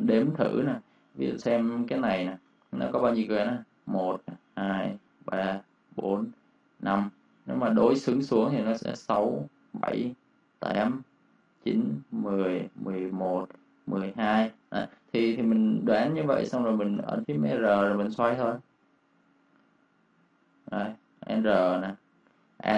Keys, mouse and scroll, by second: 0.6 v, 2.2 ctrl+shift+d, 14.9 Escape, 14.9 click, 17.1 r, 18.5-19.2 typing, 19.4 click, 21.1 typing.